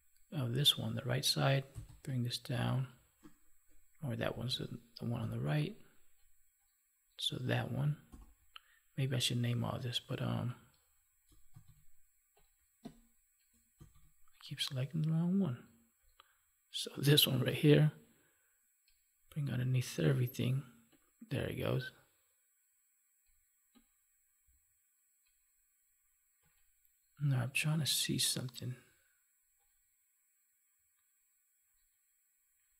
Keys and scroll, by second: 4.3 ctrl+z, 5.1 Delete, 8.0 ctrl+j, 11.5 ctrl+z, 13.8 ctrl+z.